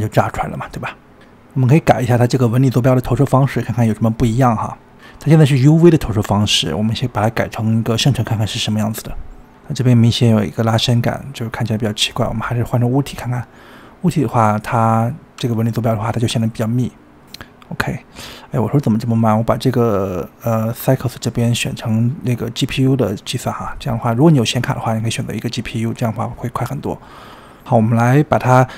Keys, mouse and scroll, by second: 1.5-1.9 scroll down 2, 1.9-3.3 middle drag, 3.3-4.2 scroll down 16, 4.2-5.8 shift+middle drag, 5.8-7.2 scroll up 11, 7.2-8.7 middle drag, 9.0 click, 10.9-12.9 middle drag, 12.9 drag, 15.0-17.0 middle drag, 17.0-19.8 scroll up 4, 19.9 click, 20.5-21.5 scroll up 7, 21.5-24.2 drag, 24.3-27.2 middle drag, 27.2 click, 27.6 middle click, 28.3 drag, 28.6 scroll down 3.